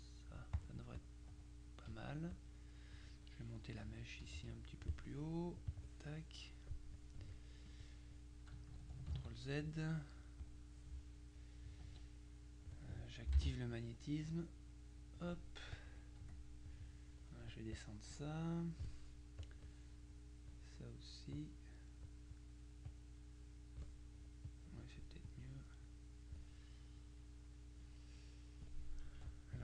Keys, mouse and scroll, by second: 2.0 F1, 2.4 click, 4.0 Pause, 5.8 click, 7.8 click, 9.2 ctrl+z, 10.5 click, 11.9 F2, 14.4 click, 15.8 click, 16.3 F1, 17.8 click, 19.5 click, 22.4 click, 24.5 click, 25.4 click, 27.3 middle click.